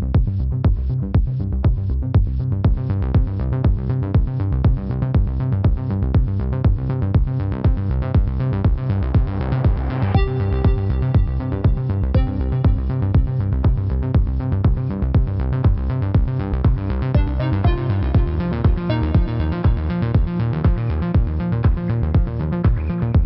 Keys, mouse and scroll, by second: 0.3 click, 2.4 click, 7.3 F9, 7.7 click, 8.6 ctrl+-, 8.9 click, 10.9 shift+click, 12.0 click, 15.8 space, 15.9 click, 16.2 space, 16.6 click, 16.7 space, 17.1 click, 18.1 alt+click, 18.7 click, 21.6 ctrl+=, 21.8 click.